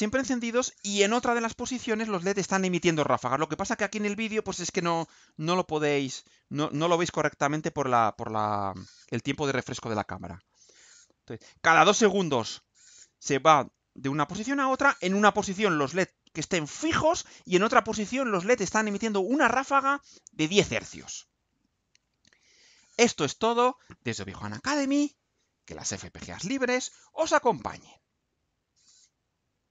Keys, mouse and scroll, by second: 28.4 click, 29.6 click.